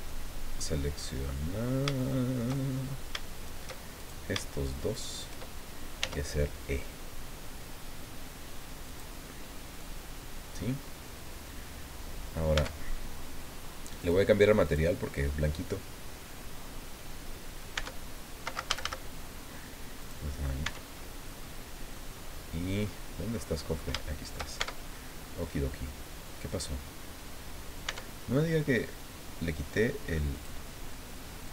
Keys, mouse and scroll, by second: 0.1 click, 1.0-3.1 drag, 4.0 shift+right click, 4.9 shift+right click, 6.0 e, 8.9 click, 9.3 middle click, 12.6 Tab, 14.0 click, 14.6 click, 17.8 Tab, 18.7 a, 20.0 click, 20.6 Tab, 21.0-21.3 scroll down 1, 21.3 middle click, 22.1-22.6 scroll down 1, 22.8-24.5 middle drag, 24.6 shift+Tab, 24.9-25.4 shift+scroll up 2, 27.8 Tab, 30.3 click.